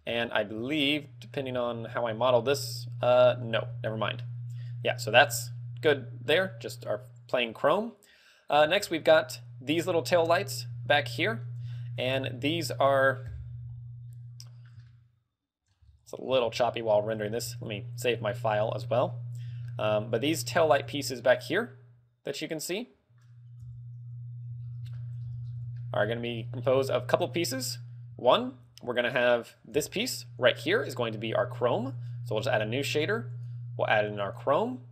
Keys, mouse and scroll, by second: 0.4 shift+middle click, 1.1 middle click, 1.1 scroll up 1, 2.1 z, 2.9 shift+middle click, 4.0 z, 4.9 scroll down 2, 5.6 shift+middle click, 7.3 scroll down 2, 7.4 scroll up 4, 8.8 z, 9.5 right click, 10.3 right click, 11.2 z, 11.3 middle click, 11.8 shift+middle click, 12.5 scroll up 2, 12.6 z, 12.8-13.2 scroll down 4, 13.6 KP_Decimal, 14.2 middle click, 15.0 shift+middle click, 16.0 scroll up 6, 16.8 z, 16.9 shift+middle click, 17.5 ctrl+w, 18.1 scroll up 1, 19.8 shift+middle click, 20.7-21.1 scroll up 6, 21.1 z, 23.0 middle click, 23.7 KP_Decimal, 23.7 KP_Decimal, 24.1 KP_3, 24.1 KP_3, 24.7-26.9 scroll up 12, 25.1 shift+middle click, 25.8 shift+middle click, 27.5 Tab, 27.7 scroll down 1, 28.5 a, 29.0 a, 29.9 l, 32.1 click, 32.3 click, 33.4 click, 34.8 click.